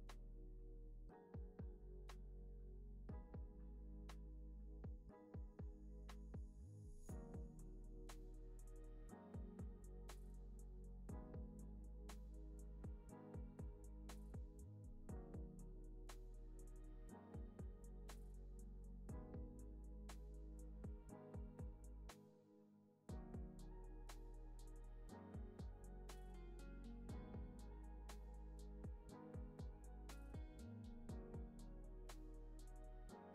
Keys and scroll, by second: 1.0 alt+z, 8.9 z.